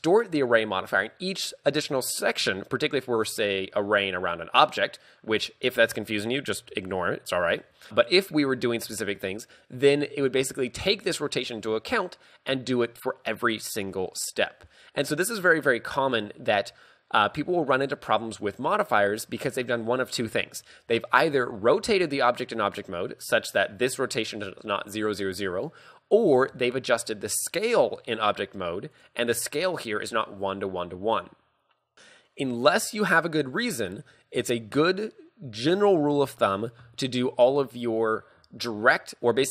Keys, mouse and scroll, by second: 2.7-6.1 scroll down 2, 26.6 s.